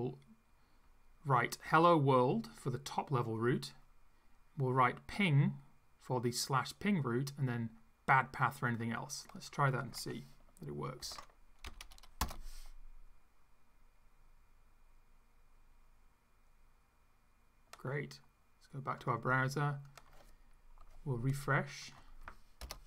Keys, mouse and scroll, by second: 9.5 click, 11.0 ctrl+c, 11.7 Up, 12.2 Return, 19.0 click, 19.8 click, 21.8 click, 22.7 Return.